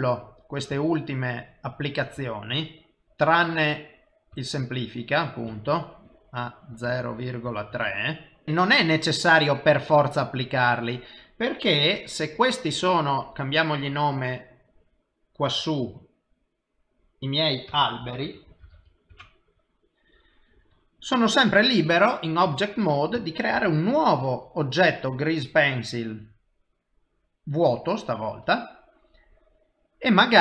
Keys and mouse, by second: 0.1 ctrl+z, 2.8 ctrl+z, 4.8 ctrl+shift+z, 6.4 click, 8.4 shift+middle click, 13.3 click, 13.6 click, 16.6 click, 16.9 click, 19.8 typing, 23.8 shift+a.